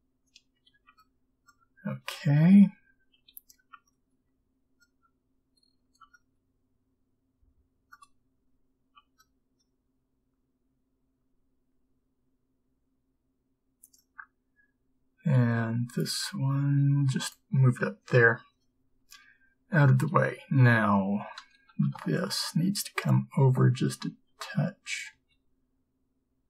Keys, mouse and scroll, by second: 9.2 b, 15.7 g, 20.0 a, 24.4 b, 24.4 g.